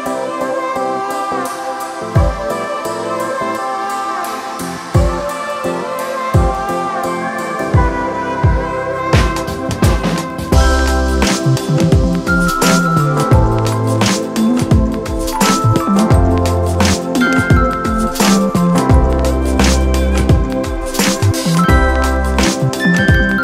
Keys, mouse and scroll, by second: 7.3 ctrl+d, 17.6 alt+shift+click.